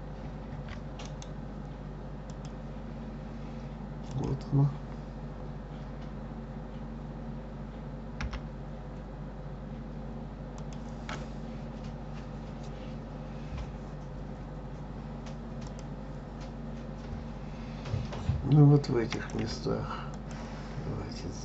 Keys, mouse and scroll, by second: 1.0-4.1 right drag, 4.1 click, 8.2 g, 15.6 click, 19.1 click, 20.1 shift+click.